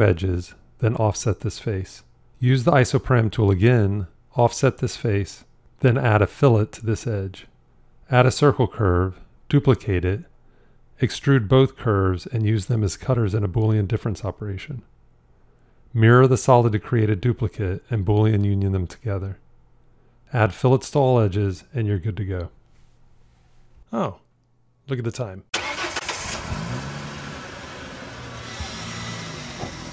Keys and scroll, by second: 2.2 ctrl+r, 10.4 shift+d, 13.9 q, 16.2 alt+x, 19.2 q.